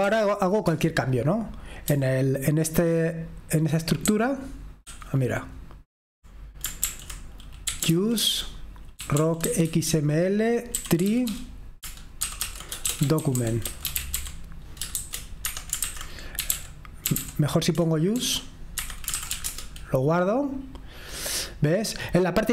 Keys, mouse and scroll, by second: 0.0-0.4 typing, 0.4 Escape, 1.3 Return, 2.4 j, 4.5-5.6 typing, 7.9-9.0 typing, 10.5-11.8 typing, 12.9-14.5 typing, 15.5-16.6 typing, 18.3 Escape, 19.1-20.0 typing, 21.6 typing.